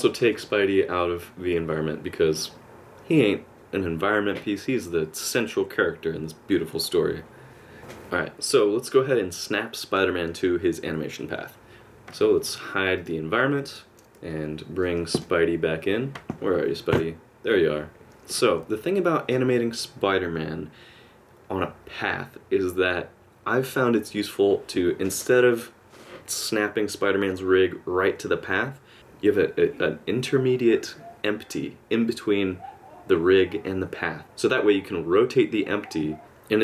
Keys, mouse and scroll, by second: 13.0 click, 16.9 KP_Decimal, 17.9 KP_Subtract, 18.0 alt+middle click.